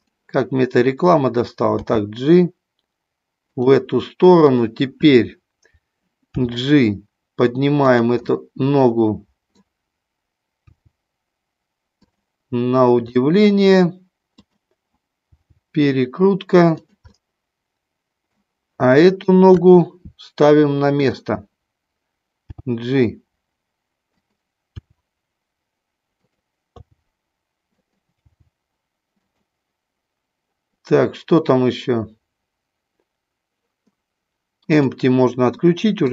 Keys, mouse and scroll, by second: 1.8 g, 3.4 click, 4.4 click, 6.3 g, 7.8 click, 8.3 scroll up 1, 8.4-9.6 middle drag, 10.7 g, 12.1 click, 13.1 middle click, 14.3 click, 15.2 g, 17.1-18.4 middle drag, 19.0 scroll up 1, 19.2 middle click, 19.4 KP_3, 20.8 click, 22.4 g, 24.3 click, 24.7 r, 26.2 click, 26.8 g, 27.8 click, 28.2 g, 29.2 click, 34.7 scroll up 1, 35.7 scroll up 1, 35.8 middle click.